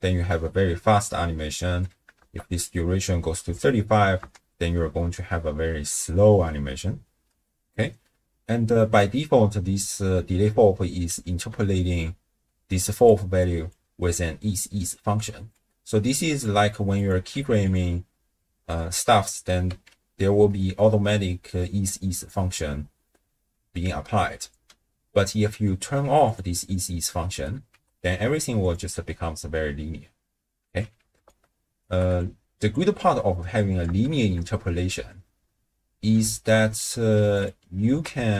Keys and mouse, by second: 1.7 space, 2.2 shift+space, 2.6 click, 4.2 space, 7.1 space, 12.6-15.1 d, 13.1 click, 15.5 click, 15.5 d, 16.9 click, 17.5 q, 19.7 a, 25.3 middle click, 26.2 click, 27.7 t, 31.0 d, 31.3 click, 31.8 d, 32.2 click, 32.2 d, 33.9 shift+space, 36.1 space, 36.8 click, 38.2 shift+space.